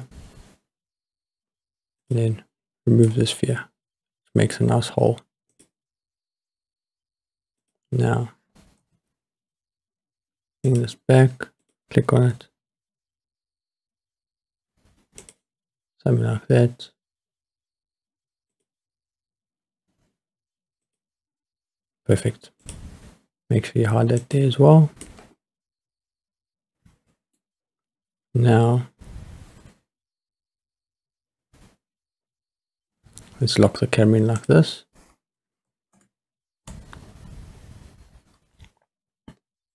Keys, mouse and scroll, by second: 2.0 click, 3.1-4.5 middle drag, 5.5 click, 7.6 click, 8.8 s, 10.7 click, 11.6 click, 12.3 s, 15.2 click, 18.5 click, 20.9 click, 21.8 scroll down 3, 22.6 click, 24.2 click, 25.0-27.4 middle drag, 27.6-31.1 scroll up 3, 31.3-31.8 scroll up 2, 31.8-32.5 scroll down 2, 34.4 click, 35.9 ctrl+alt+KP_0, 37.0-37.8 scroll up 5, 39.0-39.7 scroll up 1.